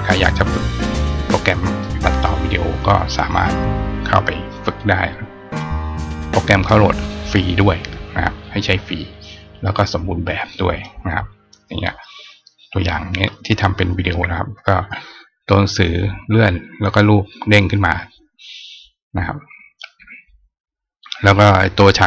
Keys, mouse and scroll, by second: 3.3 click, 8.2 click, 9.0 click, 10.5 click, 11.2 click, 12.7 click.